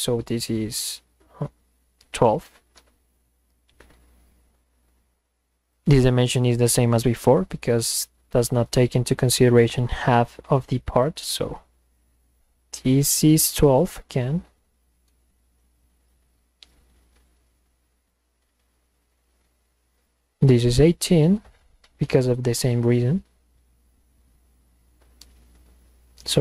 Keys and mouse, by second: 2.8 Return, 5.7 click, 11.2 click, 15.1 Return, 18.1 click, 20.0 click, 21.0 click, 24.9 Return.